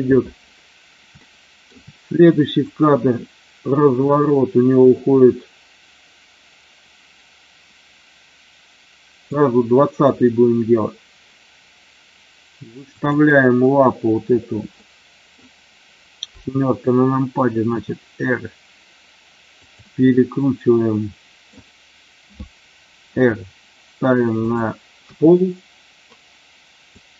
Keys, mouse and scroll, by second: 1.3-1.6 shift+middle drag, 2.6-9.4 drag, 12.9-13.4 drag, 14.8-15.3 middle drag, 17.5 r, 19.5 click, 20.0-21.4 middle drag, 23.1 r, 24.4 click, 26.9-27.1 drag.